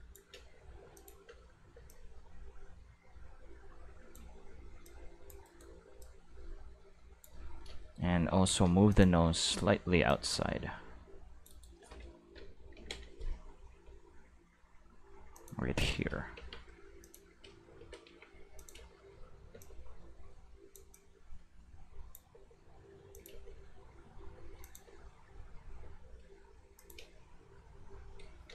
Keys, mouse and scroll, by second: 0.3 space, 0.8 space, 0.9 click, 1.2 space, 1.7 space, 1.9-4.1 drag, 4.8 click, 5.4 right click, 6.0 click, 8.3 alt+a, 8.9 click, 9.3 c, 9.9 middle click, 10.1-11.4 drag, 11.6 right click, 12.7 ctrl+l, 13.7 g, 15.3 click, 16.4 Tab, 17.0 click, 17.3-19.5 typing, 18.6 click, 19.6 click, 19.9-20.7 drag, 20.9-22.1 drag, 22.3 space, 22.9 space, 23.1 click, 23.3 space, 24.3 space, 24.6 click, 24.8 space, 25.8 space, 26.8 click, 27.0 space.